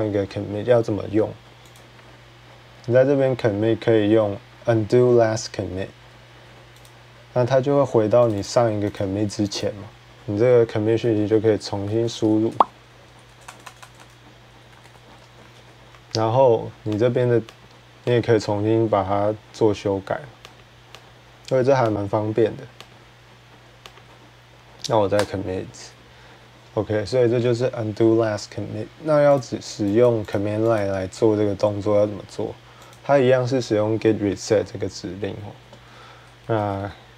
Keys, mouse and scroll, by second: 1.6 click, 6.7 click, 8.1 click, 8.2 click, 8.7 click, 9.4 click, 11.4-15.8 typing, 16.8 click, 17.4 click, 18.0 click, 20.1-20.9 typing, 20.4 click, 20.8 click, 21.7 click, 22.7 click, 23.8 click, 25.0 ctrl+Return, 29.2 click, 29.9 click, 30.2 click, 30.6 click, 32.7 click, 36.0-37.1 typing, 36.4 click.